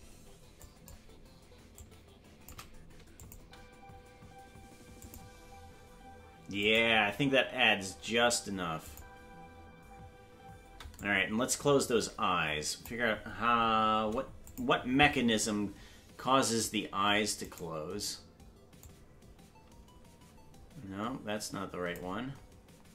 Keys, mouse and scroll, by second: 0.6 click, 1.7 click, 3.2-4.8 drag, 3.4 space, 5.0 click, 6.6 click, 8.8 click, 10.6 space, 11.0-12.9 drag, 14.4 click, 17.5 right click, 18.8-22.0 drag.